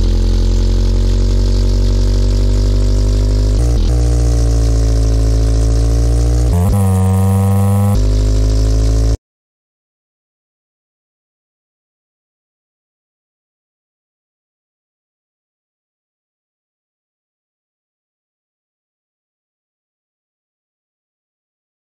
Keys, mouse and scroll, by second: 11.2 click, 11.9 click, 15.1 click, 15.3 click, 20.2-21.9 middle drag.